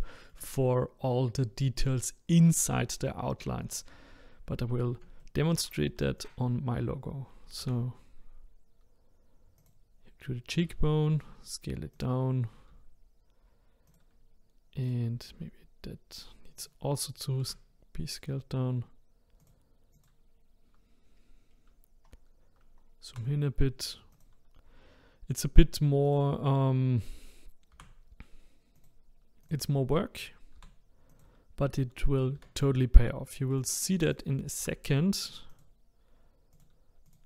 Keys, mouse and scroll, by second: 0.0-3.1 shift+middle drag, 5.2 shift+middle click, 6.2 click, 7.6 e, 12.7 s, 14.8 click, 15.3 s, 17.4 g, 19.9 click, 21.5-22.1 scroll up 2, 22.1-22.6 scroll down 2, 22.6-23.1 scroll down 1, 23.1 g, 26.1 click, 27.7 g, 29.4 click, 30.6 g, 32.3 e, 34.1 click, 34.6 r, 36.5 click, 37.1 click.